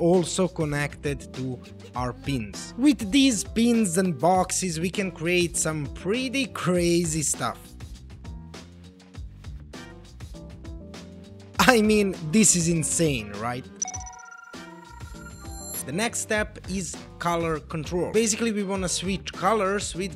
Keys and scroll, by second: 6.2-11.7 typing.